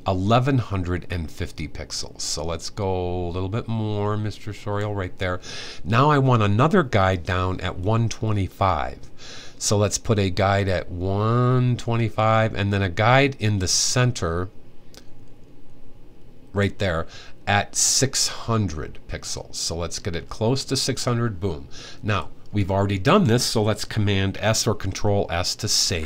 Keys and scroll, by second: 25.6 super+s.